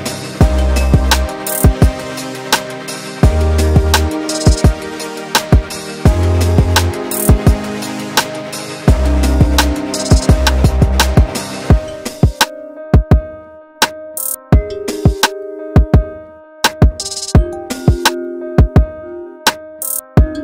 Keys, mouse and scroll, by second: 0.3 e, 3.0 scroll down 2, 3.1 middle click, 3.8-4.1 scroll up 2, 4.1-5.5 shift+middle drag, 5.5 ctrl+z, 6.8 e, 10.1 click, 11.1 click, 12.5-14.9 shift+middle drag, 14.9 click, 15.9 click, 17.4 Tab, 17.7-18.3 scroll down 1, 18.3-19.4 middle drag, 19.4 scroll up 2, 19.6 middle click, 20.0 scroll up 1, 20.2-20.4 scroll down 1.